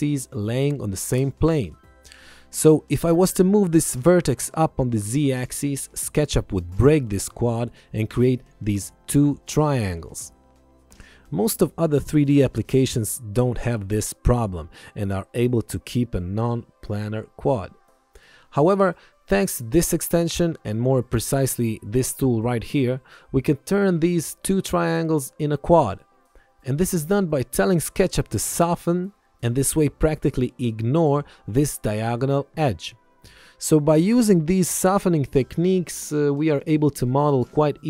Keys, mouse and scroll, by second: 2.8 click, 3.2 ctrl+shift+x, 3.7 click, 4.8 Up, 6.8 click, 7.5 ctrl+1, 7.7 click, 31.8 alt+y, 32.1 click, 32.9 alt+y, 33.3 click, 37.3 alt+y.